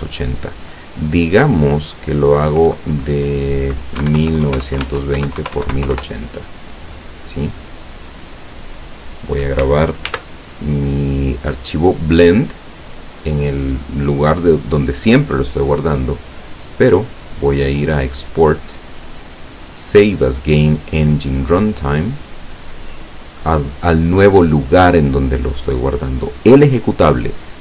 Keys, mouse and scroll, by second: 1.4 click, 4.0-5.8 typing, 4.9 Tab, 6.0 KP_Enter, 10.1 ctrl+s, 14.8 click, 16.7 click, 21.7 click, 23.3 click.